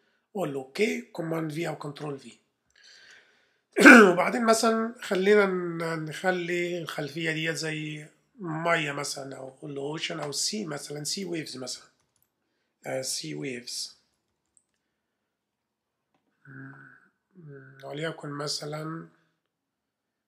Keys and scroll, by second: 1.5 super+v, 2.6 v, 3.0 super+Tab, 8.5 super+Tab, 11.7-15.0 typing.